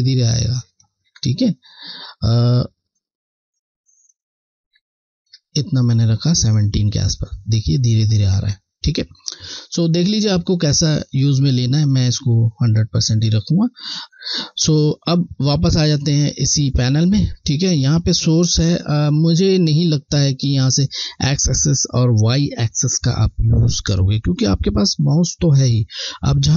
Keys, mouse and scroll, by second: 2.4 click, 5.1 alt+click, 11.1 click, 15.9 click, 19.7 click, 19.9 scroll, 21.9 alt+scroll down 1.